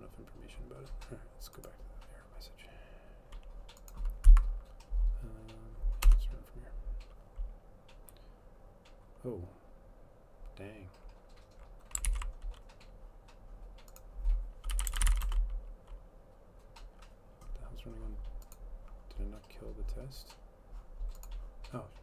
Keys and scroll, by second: 6.1 Return, 12.1 ctrl+c, 14.5-15.7 typing, 17.1 typing.